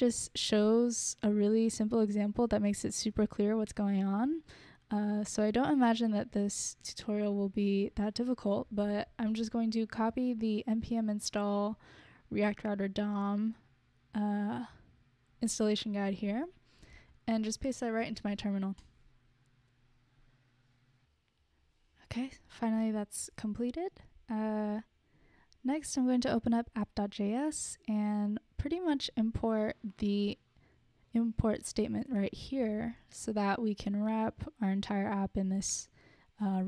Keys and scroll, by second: 8.4 super+c, 8.7 super+c, 9.0 super+c, 16.7 super+c, 17.9 super+v, 18.5 Return, 33.1 super+c, 33.4 super+c, 33.5 super+c.